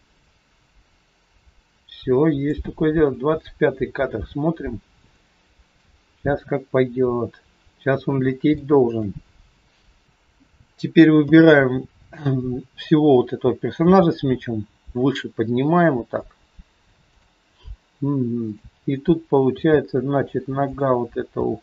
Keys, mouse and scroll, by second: 5.1 shift+middle click, 6.2-6.8 scroll up 1, 7.9 scroll down 2, 8.5 shift+middle click, 18.3 click, 19.4 g, 21.3 r.